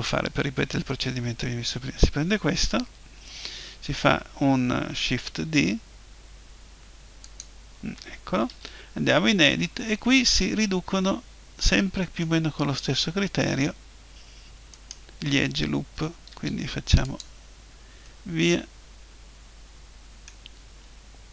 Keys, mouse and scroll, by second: 5.3 shift+d, 7.4-9.3 drag, 8.5 Tab, 9.7 middle click, 14.7-16.5 right drag, 16.3 Delete, 18.0-19.9 middle drag.